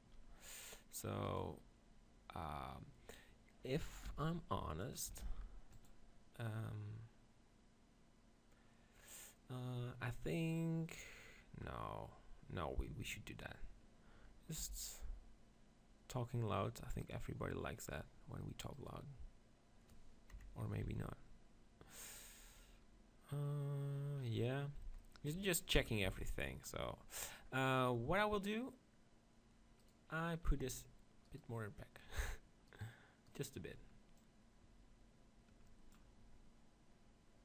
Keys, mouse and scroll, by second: 1.3-3.0 right drag, 4.1 shift+f, 4.9-7.7 drag, 5.2 shift+f, 14.6 g, 17.1-19.1 drag, 18.8-20.3 right drag, 20.3 KP_7, 20.8 z, 21.2 middle click, 24.2 middle click, 25.8 KP_0, 26.1 z, 29.4 z, 29.8 right click, 33.4-35.2 right drag, 34.2-36.0 drag.